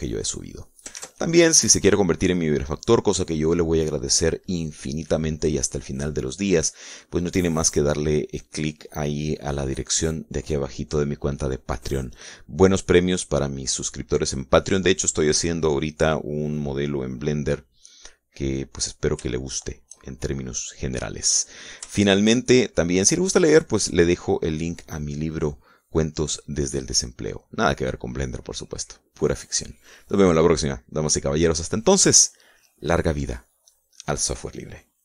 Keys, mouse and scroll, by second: 0.0 click, 1.0 click, 1.9 click, 2.4 ctrl+s, 2.6 ctrl+click, 19.2-20.5 drag, 20.5 shift+middle click, 20.8 shift+click, 21.8 click, 22.4-24.0 middle drag, 24.5 middle click, 31.8 middle click, 32.6 scroll up 1, 32.9 middle click.